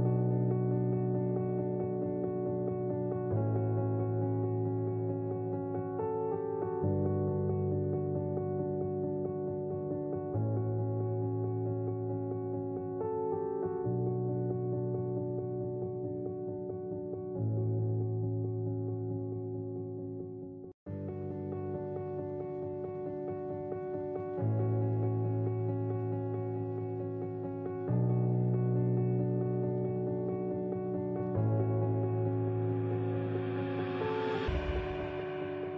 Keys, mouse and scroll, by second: 1.1 click, 1.4 click, 2.0 ctrl+z, 2.6 click, 4.0-5.7 right drag, 6.3 click, 7.4-9.3 drag, 9.7 click, 10.4 click, 11.4-12.6 drag, 13.7 click, 14.7 ctrl+b, 16.2 click, 16.5 click, 17.2 click, 18.7 Tab, 20.0 click, 20.3 click, 21.0-23.3 drag, 24.2 click, 26.2 click, 27.7 click, 29.1-31.5 drag, 34.6 Tab.